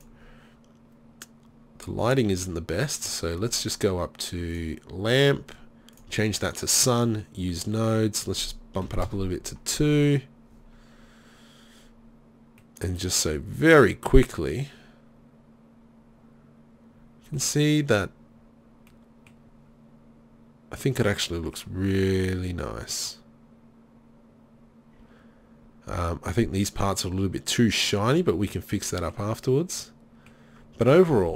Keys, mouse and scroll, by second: 15.3 middle click, 19.8-20.8 middle drag.